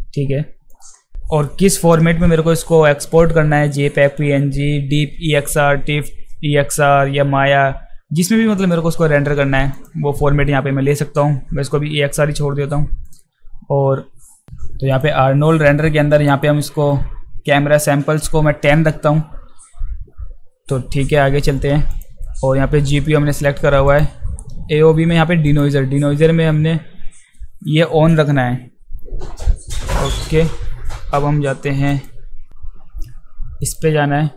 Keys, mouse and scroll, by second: 0.7-1.1 drag, 1.8 click, 9.8 click, 14.9 click, 16.3 click, 21.9 click, 23.9 click, 25.5 click, 31.9 click, 33.6 click.